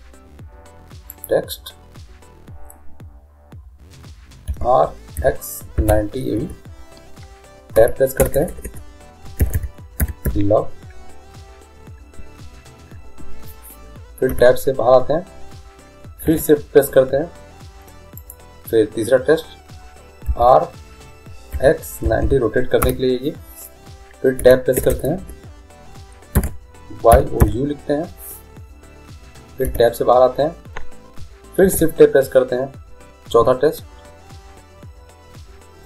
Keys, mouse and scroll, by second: 4.5 r, 7.7 Tab, 8.2-10.2 typing, 14.3 Tab, 16.3 shift+a, 20.3 r, 24.4 Tab, 24.8 BackSpace, 25.2 BackSpace, 26.3 shift+y, 27.1 o, 27.4 u, 29.6 Tab, 31.6 shift+a.